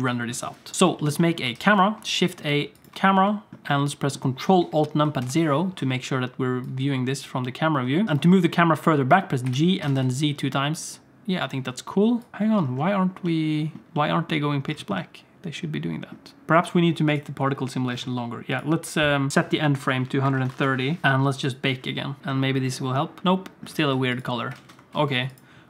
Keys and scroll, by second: 1.5 shift+a, 5.3 ctrl+alt+KP_0, 8.0 g, 9.4 g, 11.2 alt+a, 11.2 ctrl+s, 13.9 alt+a, 13.9 ctrl+s, 23.2 alt+shift+z, 23.7 alt+shift+z, 24.6 alt+a, 25.0 ctrl+s.